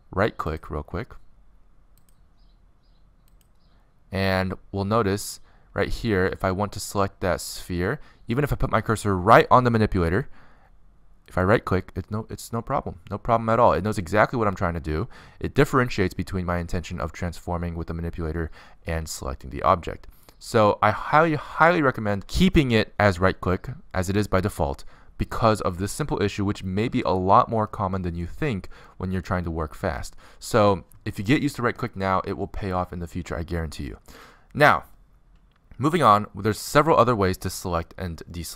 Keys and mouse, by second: 2.6 right click, 5.7-7.8 drag, 6.4-7.6 right drag, 9.4-10.9 middle drag, 16.6 middle click, 17.4-18.6 middle drag, 19.4-21.7 middle drag, 22.3-25.2 middle drag, 25.3 middle click, 25.6 middle click, 25.8-29.4 middle drag, 29.4 z, 31.4 middle click, 32.9 middle click, 33.4-38.4 middle drag.